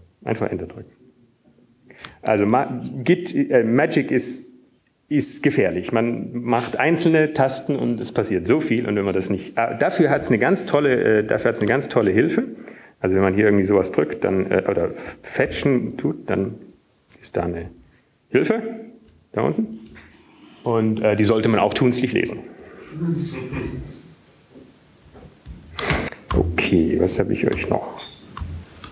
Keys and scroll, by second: 3.2 Up, 3.2 Down, 4.2 Return, 14.0 alt+Tab, 15.0 Down, 15.0 Up, 18.8 f, 27.9 alt+Tab, 27.9 Down, 27.9 Up, 27.9 shift+f.